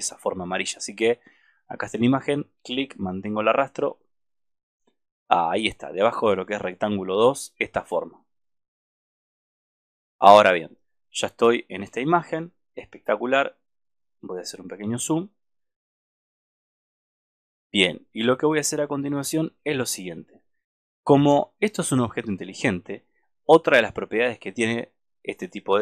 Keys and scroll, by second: 17.1 alt+space.